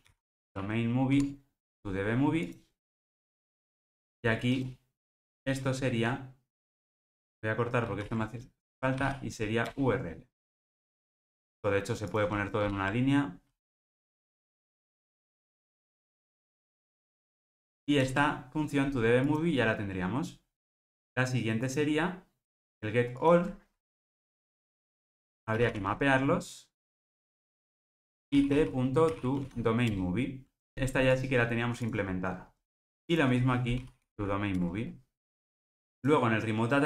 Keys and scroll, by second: 1.1 Tab, 7.1 super+z, 7.9 super+x, 11.9 Return, 12.5 alt+Return, 21.9 alt+Return, 26.8 Return, 34.5 Return.